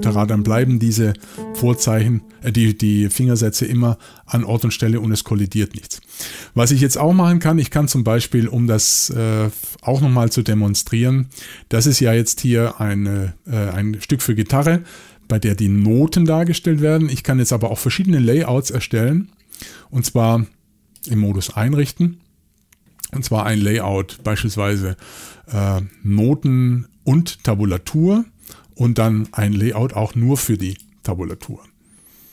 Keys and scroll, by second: 1.2 alt+shift+Up, 3.7 typing, 7.1 typing.